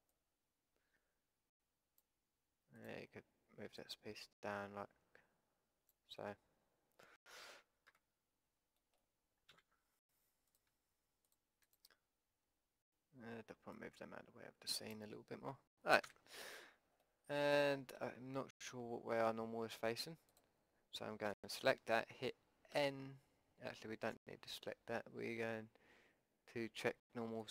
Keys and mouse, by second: 0.1-2.1 drag, 2.1 middle click, 2.7-5.9 drag, 5.9 middle click, 7.9 KP_5, 9.5 a, 10.5-15.7 drag, 13.7 middle click, 16.0 a, 16.3-17.4 middle drag, 17.6 middle click, 17.8-19.0 drag, 20.3-22.3 drag, 21.3 a, 22.8 n, 24.1 a, 27.4-27.5 middle drag.